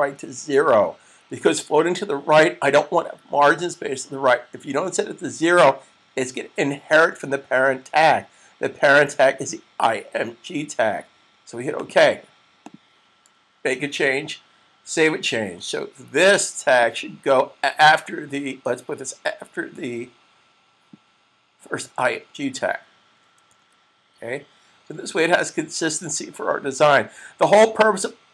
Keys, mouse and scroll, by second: 0.4 0, 11.9 click, 14.7 super+s, 16.7 click, 23.7 super+s.